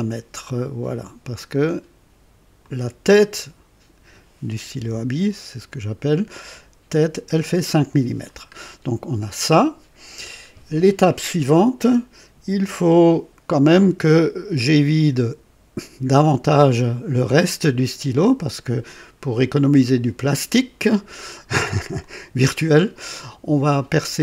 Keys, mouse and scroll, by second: 2.6 click, 4.7 KP_2, 8.5 scroll down 1, 13.7-15.2 drag, 22.0-23.5 drag.